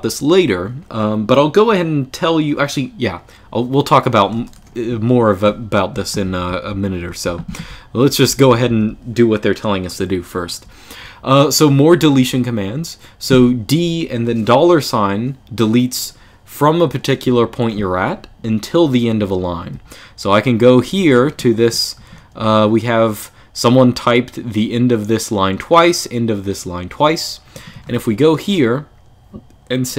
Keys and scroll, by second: 5.7-8.6 typing, 10.4-10.8 k, 11.6 k, 11.9 k, 19.5-22.2 typing, 27.3 l, 27.5 l, 27.7 l.